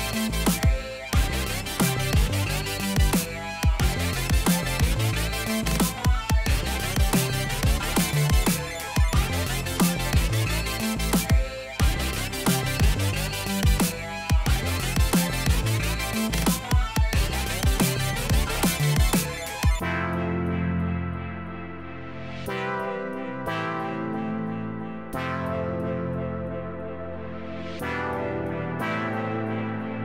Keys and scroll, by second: 4.9 ctrl+t.